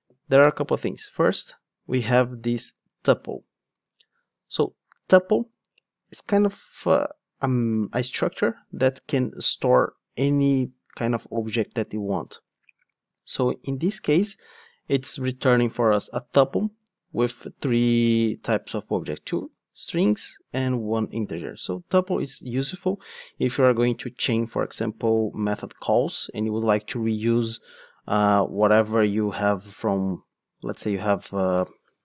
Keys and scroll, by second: 30.8 Tab.